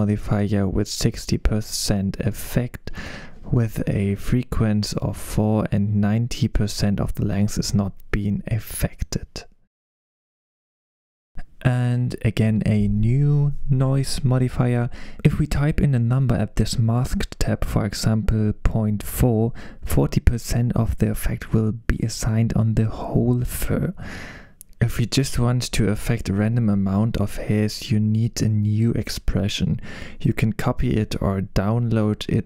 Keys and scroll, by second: 0.4-1.8 typing, 5.4 4, 7.0-7.9 typing, 10.8 super+s, 14.4 BackSpace.